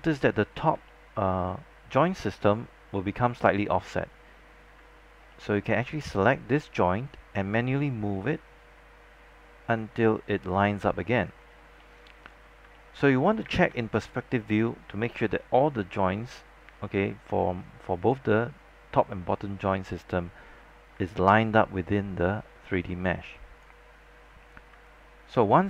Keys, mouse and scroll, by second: 0.1 alt+middle click, 0.7 scroll down 1, 1.0 alt+middle click, 2.0 scroll up 1, 2.1 alt+middle click, 5.2 alt+scroll up 1, 5.4 alt+middle click, 6.3-10.5 drag, 10.5-10.8 scroll down 1, 11.0 alt+middle click, 11.9 alt+middle click, 12.5 scroll down 1, 12.7 alt+middle click, 13.6 space, 13.7-14.8 drag, 15.2-18.2 alt+drag, 21.2-23.8 alt+drag, 24.6 scroll up 1, 25.0 alt+click.